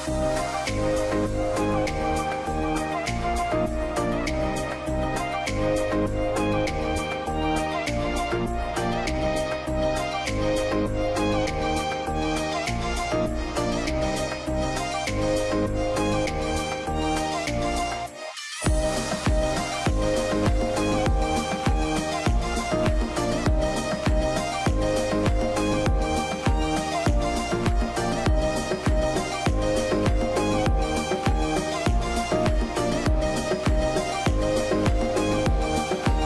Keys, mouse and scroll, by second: 0.0-2.1 typing, 0.8 Return, 2.2 Return, 4.1 double click, 4.8 -, 5.3 ., 5.4 2, 5.8 Return.